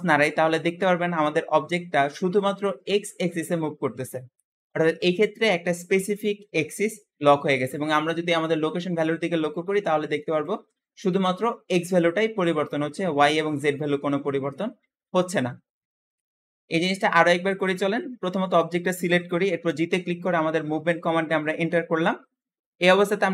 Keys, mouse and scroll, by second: 16.1-17.1 shift+middle drag, 17.1-19.6 scroll up 1, 19.6 g.